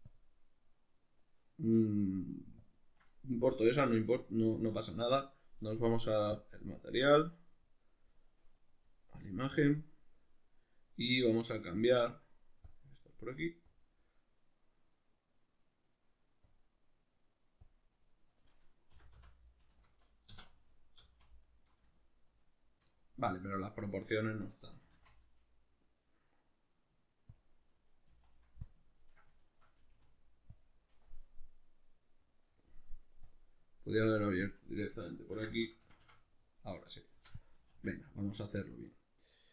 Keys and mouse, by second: 6.4-12.5 drag, 13.7-18.9 drag, 18.9 r, 21.0 z, 22.0-25.9 shift+middle drag, 24.8 s, 27.4 click, 28.1 s, 28.7 click, 28.9-30.6 ctrl+middle drag, 29.8 g, 30.6 click, 35.9 Escape, 36.8 right click, 37.2 x, 37.7 shift+a.